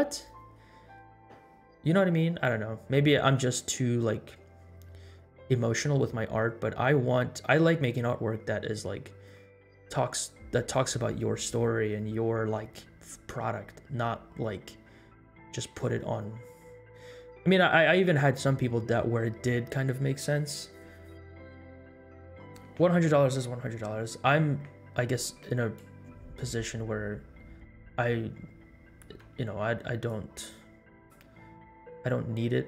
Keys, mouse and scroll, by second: 29.2 space, 30.2-31.7 drag, 32.1-32.6 drag.